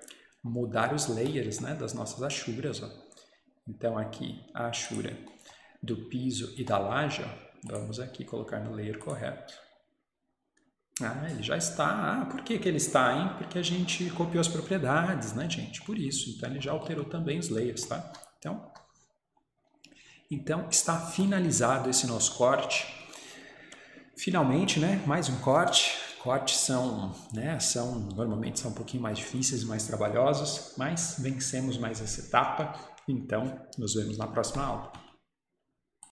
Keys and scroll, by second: 18.1 Escape.